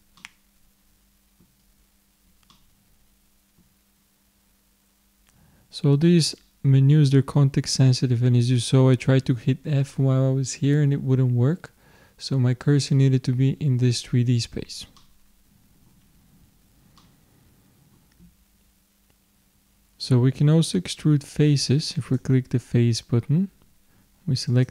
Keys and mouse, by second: 0.2-2.0 middle drag, 2.6-14.2 middle drag, 15.0-19.0 middle drag, 19.6-22.1 middle drag, 22.1-23.8 drag, 24.5-24.7 drag.